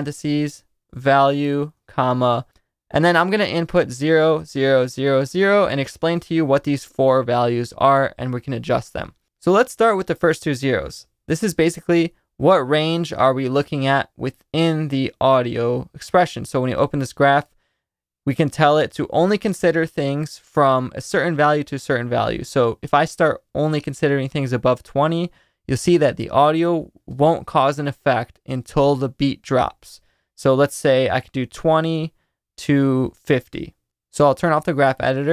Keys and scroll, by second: 0.0-1.7 typing, 3.6-5.8 typing.